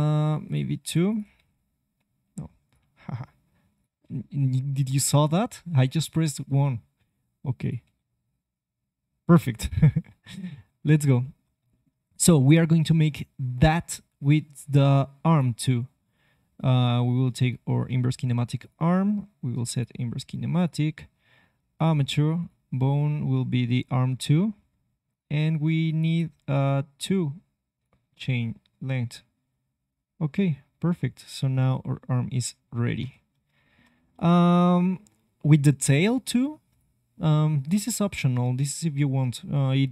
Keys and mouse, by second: 1.3 g, 7.8 g, 10.8-14.0 middle drag, 14.2-15.3 middle drag, 15.3-17.4 drag, 18.6-25.8 drag, 26.0-29.8 drag, 28.2 g, 33.3-36.0 middle drag, 36.1 middle click, 36.6-39.9 drag.